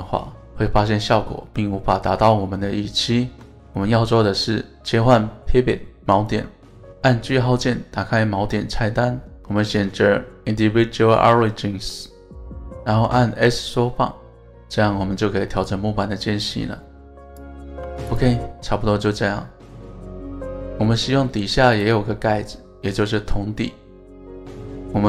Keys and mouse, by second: 3.2 alt+s, 5.4 right click, 17.3 click, 17.7 Tab, 18.1 click, 18.7 middle drag, 19.7-21.4 middle drag, 22.1-25.0 middle drag.